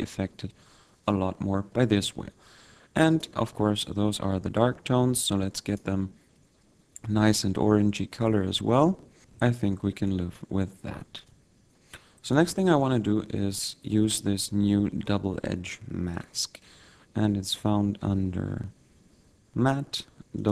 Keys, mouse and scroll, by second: 3.4 click, 5.6 click, 8.9 click, 9.7 scroll down 2, 9.8 middle click, 11.4 click, 14.4 shift+a.